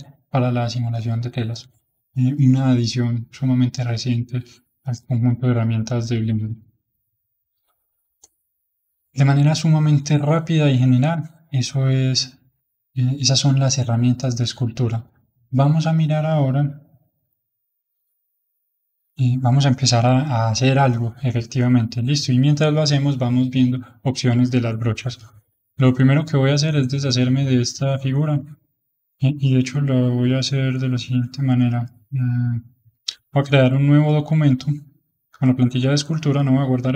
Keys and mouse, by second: 11.8-15.5 middle drag, 15.5-18.2 middle drag, 18.2-21.4 drag, 21.6-25.5 middle drag, 25.5 ctrl+Tab, 26.2-27.9 middle drag, 27.9 ctrl+Tab, 33.3 ctrl+n.